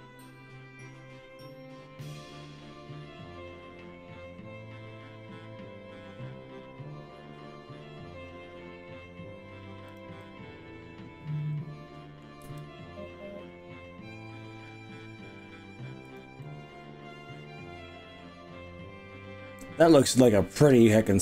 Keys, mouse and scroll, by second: 0.5-0.9 scroll up 4, 0.9-1.5 scroll down 4, 2.1-2.7 scroll up 2, 2.7 scroll down 1, 3.3-3.7 scroll up 2, 3.7-4.5 scroll down 4, 9.9 click, 10.2-12.2 middle drag, 12.2 click, 12.5 g, 16.1 click, 16.4-21.2 middle drag.